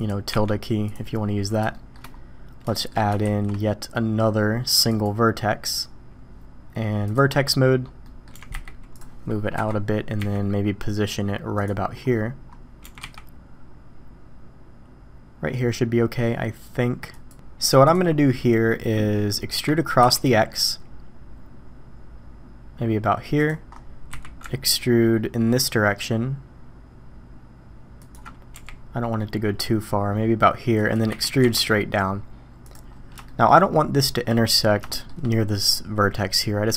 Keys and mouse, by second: 0.3 `, 1.7 shift+click, 2.7 shift+drag, 3.2 shift+a, 7.0 click, 8.0 middle drag, 8.3 g, 9.5 KP_1, 10.2 g, 12.8 g, 19.6 e, 24.1 e, 28.5 g, 31.1 e, 33.2 shift+drag, 34.9 shift+click.